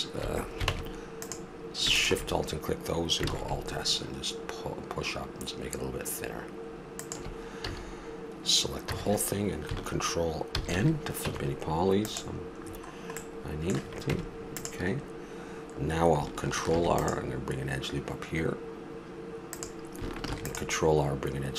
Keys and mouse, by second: 0.7 ctrl+Tab, 3.3 alt+s, 7.6 a, 8.8 a, 10.5 ctrl+n, 11.3 Tab, 14.1 Tab, 16.7 ctrl+r, 20.3 ctrl+r.